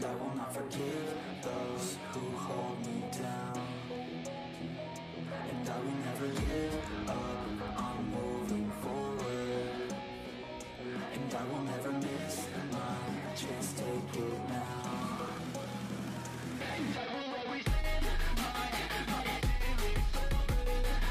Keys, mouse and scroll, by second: 0.0 ctrl+z, 0.1-0.5 scroll up 2, 0.5 ctrl+click, 1.2 scroll down 1, 1.4-4.0 shift+middle drag, 4.1 shift+middle click, 4.3 scroll up 1, 4.5 middle click, 5.0-6.1 ctrl+drag, 6.1 middle click, 6.7 ctrl+z, 6.8 middle click, 7.3 scroll down 2, 7.4-9.4 shift+middle drag, 9.4 scroll up 1, 9.6-11.3 shift+middle drag, 11.3-12.0 scroll up 2, 12.0 g, 13.7 t, 15.0 click, 15.4 f, 15.7 shift+middle click, 16.3 KP_1, 16.9 shift+middle click, 17.6 KP_3, 18.0 shift+middle click, 18.1-19.6 scroll up 5, 18.3 shift+middle click, 19.6-21.1 middle drag.